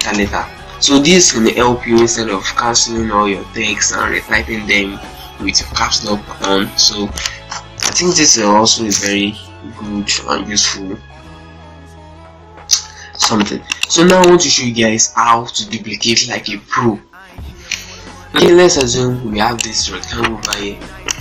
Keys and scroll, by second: 0.2 ctrl+F3, 0.4 F4, 6.5 Delete, 13.7 z, 14.2 ctrl+space, 20.6 z.